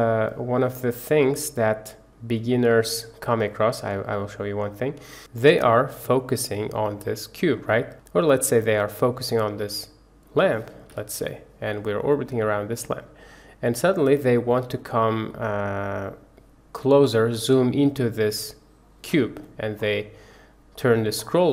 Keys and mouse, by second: 0.7 click, 3.1-3.4 drag, 7.8 click, 10.9 KP_Decimal, 11.7-12.3 drag, 12.3-14.4 middle drag, 15.3-17.2 middle drag, 20.7 middle click.